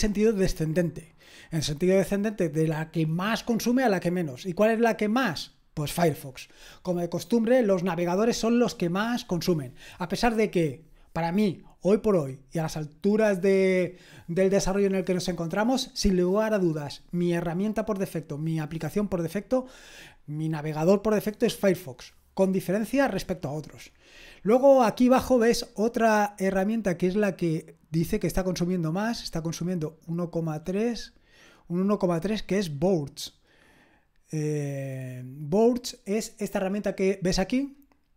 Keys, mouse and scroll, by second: 29.3-30.9 drag, 36.8-38.1 drag.